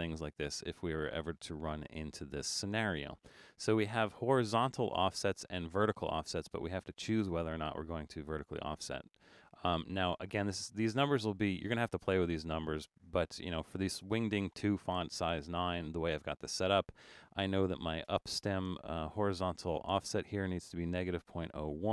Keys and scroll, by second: 20.8-21.9 typing.